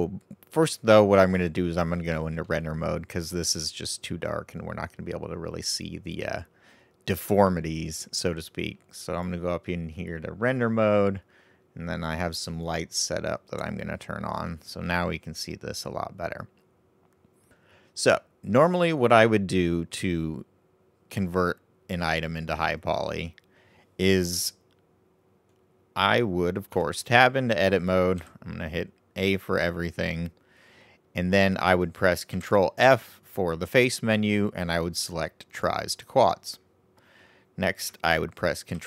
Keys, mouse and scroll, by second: 2.4-5.5 middle drag, 9.1 click, 12.8 click, 14.4-17.4 middle drag, 23.0-25.8 right drag, 26.7 Tab, 28.1 a, 32.3 ctrl+f, 38.7 ctrl+e.